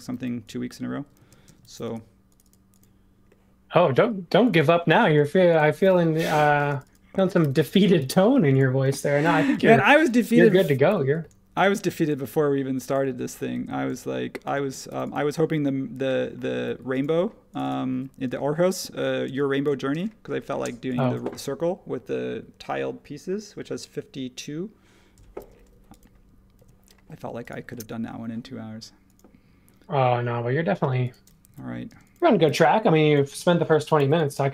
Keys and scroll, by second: 0.1 e, 1.1 super+z, 6.1 p, 7.4 super+g, 7.4 typing, 8.0 Return, 9.2-10.3 typing, 13.5 super+z, 14.7 space, 17.9 e, 25.4 space, 26.5 super+1, 31.4 typing, 33.1-34.5 typing.